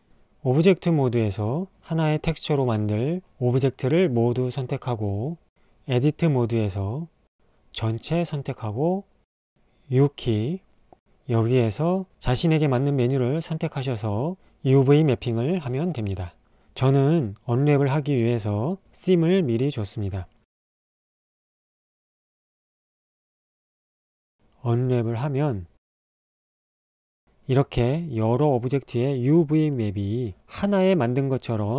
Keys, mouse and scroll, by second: 0.0 Tab, 2.6 a, 5.3 Tab, 9.4 a, 11.4 u, 18.7 middle click, 21.4-23.1 middle drag, 23.4 u.